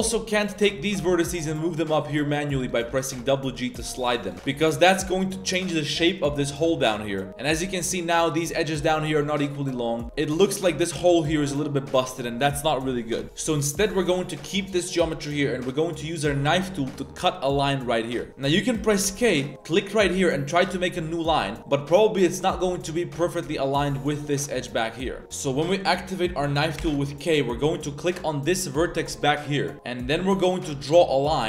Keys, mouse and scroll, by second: 0.5 z, 0.8 g, 2.1 c, 2.8 g, 3.7 c, 4.3 g, 7.1 Tab, 7.3 Tab, 7.5 2, 10.0 Tab, 13.2 ctrl+z, 13.8 a, 14.0 a, 18.3 k, 19.0 k, 26.8 k.